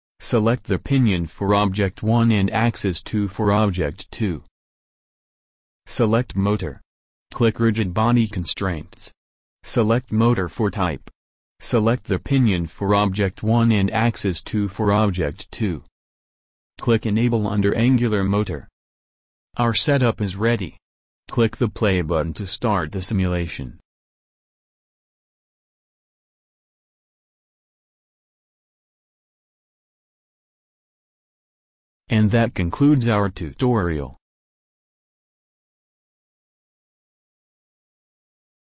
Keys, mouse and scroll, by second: 0.0 click, 0.2-9.5 middle drag, 9.5 click, 9.7 middle click, 10.0-11.4 drag, 11.9-13.4 drag, 17.2 click, 18.0 middle click, 21.6-23.0 drag, 23.4-26.4 drag, 26.9-28.4 drag, 31.4 click, 32.5 click.